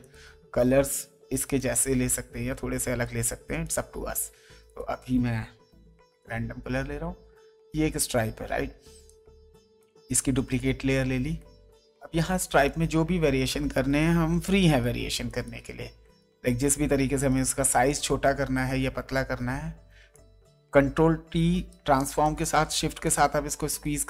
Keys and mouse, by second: 0.0 click, 1.5 click, 3.6 click, 5.7 alt+BackSpace, 7.4 ctrl+d, 12.6 shift+click, 15.2 click, 16.2 ctrl+shift+click, 20.1 alt+shift+click, 22.2 click, 23.0 ctrl+shift+click.